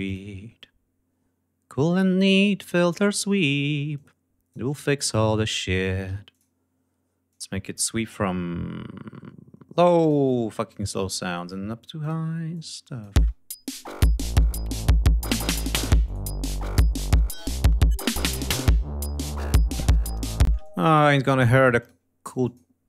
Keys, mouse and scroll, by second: 0.0 click, 2.7 click, 3.9 click, 5.5 click, 6.0 d, 6.3 click, 7.2-10.2 drag, 10.6 click, 12.0 click, 12.5 click, 13.1 space, 14.5 ctrl+scroll down 2, 15.6 click, 16.5 click, 20.4 space, 20.6 click, 21.7 click, 22.4 click.